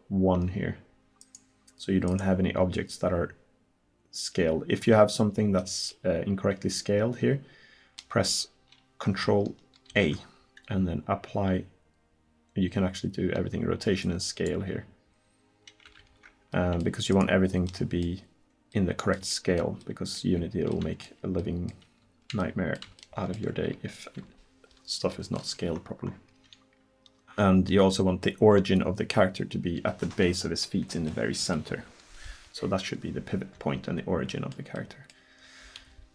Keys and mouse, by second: 5.6-7.3 middle drag, 8.0-9.9 middle drag, 9.9 ctrl+a, 16.0 ctrl+z.